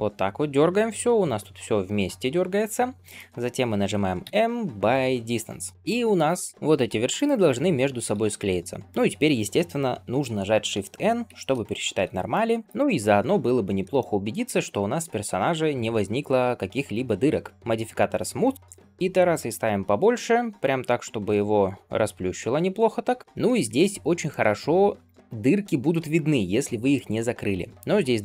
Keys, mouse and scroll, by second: 4.1 m, 5.7 middle click, 5.7-6.4 scroll up 2, 6.4 click, 6.5-7.2 scroll up 1, 6.5 g, 7.3-8.0 scroll down 4, 8.0 a, 8.4 scroll down 2, 8.8 scroll up 2, 11.2 shift+n, 11.7-12.2 scroll down 2, 12.2 shift+middle drag, 12.5 middle click, 12.6 ctrl+Tab, 12.6 scroll down 1, 12.7 ctrl+space, 13.3 scroll up 1, 13.9 shift+middle click, 18.4 click, 19.5-22.7 drag, 23.1 middle click, 23.2 ctrl+space, 23.2 scroll down 1, 23.5 shift+middle click, 23.8-24.2 scroll up 2, 24.2-26.1 middle drag, 26.1-26.8 scroll up 1, 26.8-28.2 middle drag.